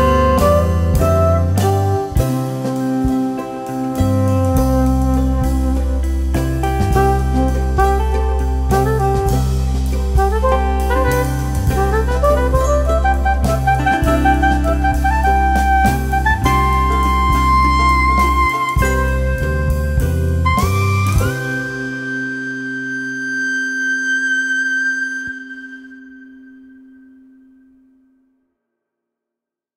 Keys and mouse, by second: 0.2 space, 0.4 click, 0.9 space, 1.0 click, 2.1 space, 2.3 click, 5.0 space, 5.3 click, 5.5 space, 6.7 click, 7.7 ctrl+click, 9.3 ctrl+alt+shift+e, 10.5 click, 19.7 click, 20.3 space, 20.4 click, 20.7 space, 22.2 click, 22.5 space, 24.8 F12.